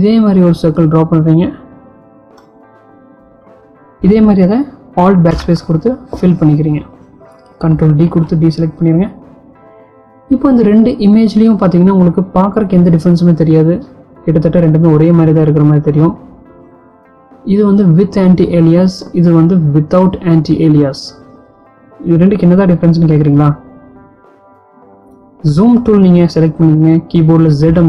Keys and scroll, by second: 5.7 alt+BackSpace, 8.7 ctrl+d, 26.3 z.